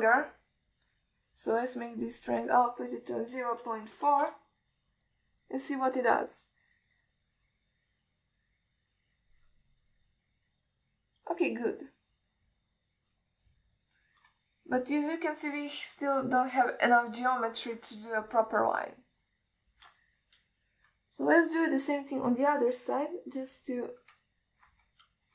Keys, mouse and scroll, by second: 3.3-5.5 drag, 8.3-10.6 drag, 11.0-14.4 alt+middle drag, 15.7 ctrl+alt+middle click, 16.4-18.1 alt+middle drag, 18.8 ctrl+alt+middle click, 20.2 shift+middle click, 21.6 KP_1, 23.2-25.0 drag.